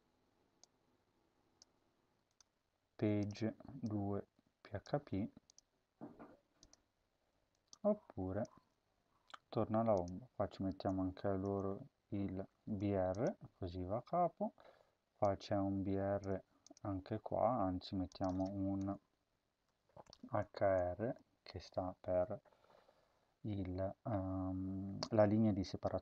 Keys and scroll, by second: 4.9 ctrl+c, 8.5 ctrl+v, 10.8-12.6 typing, 16.2 ctrl+c, 17.1 ctrl+v, 18.7 Return, 19.6-20.4 typing, 21.0 ctrl+s.